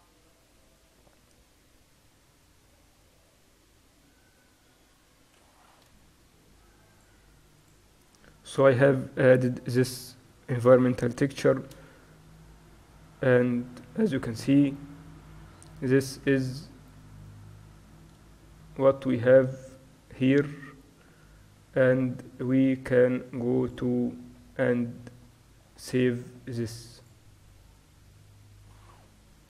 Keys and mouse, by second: 11.6 shift+z, 16.8-21.0 middle drag, 24.0-25.6 drag, 27.1 click.